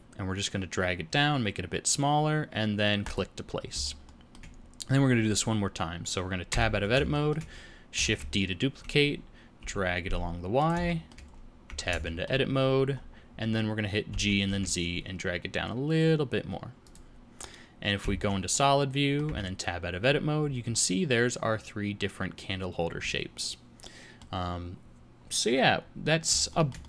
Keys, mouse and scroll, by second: 4.0 shift+middle click, 4.5-6.4 scroll down 2, 6.4 Tab, 7.1 shift+middle click, 8.0 shift+d, 10.8 shift+middle click, 11.2-11.7 scroll up 2, 11.6 Tab, 12.0 shift+middle click, 12.9-13.8 scroll up 1, 13.8 scroll up 1, 14.0 g, 17.9 z, 18.5 middle click, 19.2 Tab, 19.9-20.9 scroll down 5, 20.6 middle click, 26.4 shift+middle click.